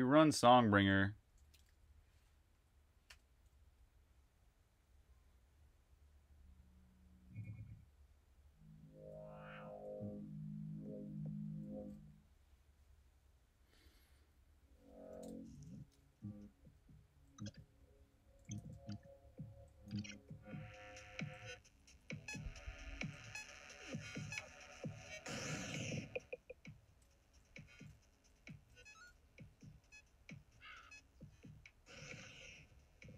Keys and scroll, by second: 1.2-2.9 typing, 7.1 f, 9.5 typing, 11.3 f, 12.9 typing, 14.7-19.9 typing, 21.7-23.5 typing, 24.8 typing, 26.6-30.6 typing, 32.7 typing.